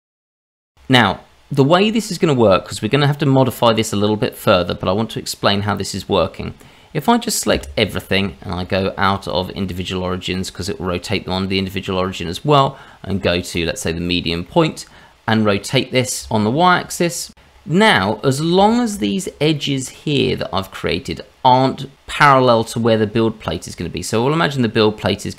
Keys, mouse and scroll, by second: 0.3 Tab, 0.8 shift+middle click, 0.8-2.8 scroll down 3, 4.4-5.2 scroll down 1, 6.3-7.5 scroll down 1, 7.5-8.6 scroll down 1, 7.5 a, 8.6 click, 14.4 middle click, 15.4 scroll down 1, 15.6 shift+middle click, 16.4 r, 17.5-18.2 scroll up 4, 18.2 middle click, 18.7 shift+middle click, 19.0 scroll up 2, 19.5 middle click, 20.9 scroll down 1, 22.3-23.4 scroll down 3, 23.4 click.